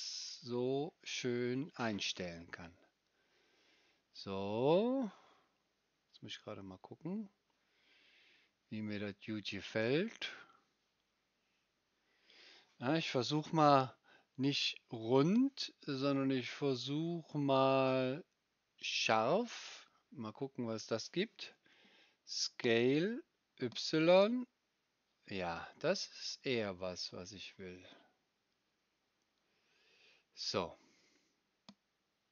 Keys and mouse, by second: 15.3-32.3 drag, 15.3-25.6 middle drag, 22.6 s.